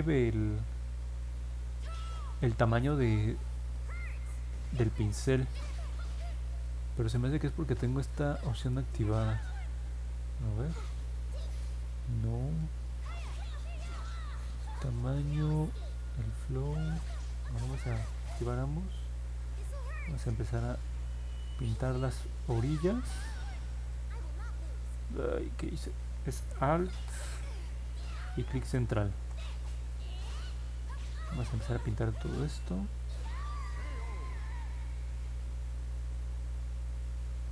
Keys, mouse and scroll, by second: 18.3 click, 19.2 click, 19.7 click, 20.0 click, 20.3 click, 20.6 click, 21.5 click, 21.8 click, 22.1 click, 22.4 click, 22.7 click, 24.2-25.9 alt+drag, 28.2-29.2 alt+middle drag, 30.1-32.9 drag, 33.9-35.8 drag.